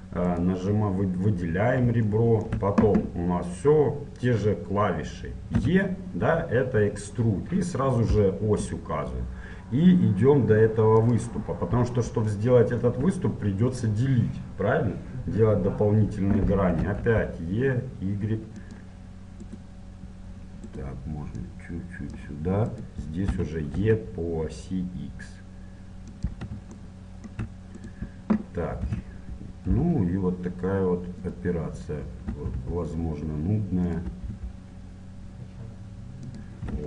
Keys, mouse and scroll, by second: 0.7 click, 1.4-4.0 middle drag, 5.6 e, 11.6-14.3 middle drag, 11.6-12.4 scroll down 1, 16.8 e, 19.5-21.5 right drag, 21.5-22.5 middle drag, 22.5 click, 23.2 middle click, 23.2-24.6 right drag, 23.3 e, 26.8-27.8 middle drag, 27.8-29.8 right drag, 28.8 e, 29.7-31.7 middle drag, 32.3 e, 34.1 e.